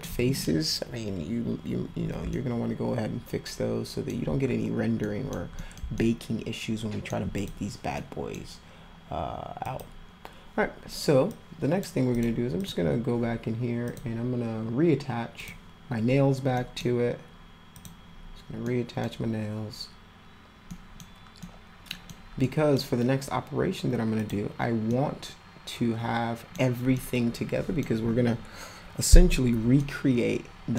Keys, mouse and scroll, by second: 2.3-4.1 alt+middle drag, 5.0 middle click, 5.6 middle click, 5.9-7.1 alt+middle drag, 7.4 click, 8.0-8.3 middle drag, 9.6 click, 11.3 click, 12.1 click, 12.6 click, 13.9 click, 15.4 click, 16.5 middle click, 17.8 click, 18.6 middle click, 20.7 middle click, 21.4 middle click, 22.4 middle click, 24.2 click, 24.9-26.5 middle drag, 26.8 scroll up 2, 26.9 middle click, 27.6-28.1 scroll up 2, 29.8-30.7 alt+middle drag.